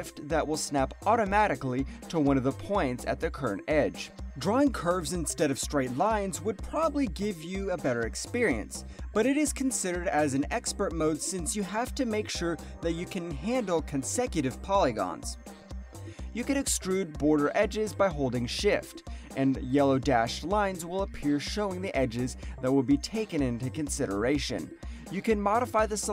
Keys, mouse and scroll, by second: 0.0 alt+middle click, 0.8 click, 3.7 alt+middle click, 4.6 click, 5.1 alt+middle click, 5.3 alt+right click, 5.5 alt+click, 5.7 alt+right click, 6.0 alt+middle click, 6.8 click, 10.8 alt+click, 11.2 alt+middle click, 11.8 alt+right click, 12.0 alt+click, 12.6 click, 13.7 alt+click, 14.0 alt+middle click, 14.4 alt+click, 14.5 alt+right click, 14.7 alt+middle click, 17.4 alt+click, 17.5 alt+right click, 17.8 alt+middle click, 25.8 alt+right click.